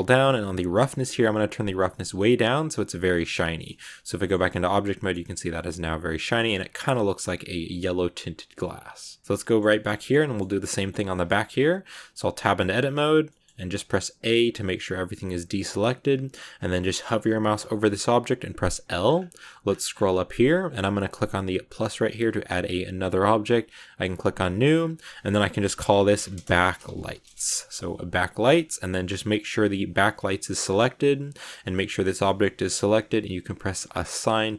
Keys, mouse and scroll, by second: 0.5-3.0 drag, 3.0 middle click, 3.2 Tab, 3.6 shift+middle click, 4.2 scroll up 2, 4.4-5.5 middle drag, 5.5 scroll down 2, 5.7 middle click, 6.4-7.1 scroll up 2, 7.1-7.7 scroll down 2, 7.7-11.0 middle drag, 11.0 scroll up 1, 11.0 middle click, 12.0 Tab, 13.2 middle click, 13.8 a, 14.1 a, 16.7-17.2 scroll up 1, 18.2 l, 18.9 scroll down 1, 18.9-19.7 scroll up 16, 19.9 scroll down 1, 20.4 scroll up 2, 21.6-27.8 drag, 29.7 scroll down 2, 31.2-34.5 drag.